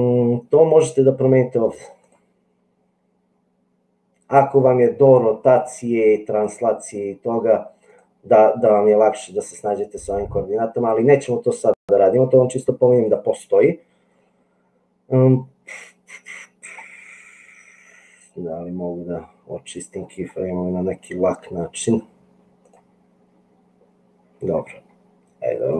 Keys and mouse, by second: 2.3-4.4 drag, 7.9-10.7 drag.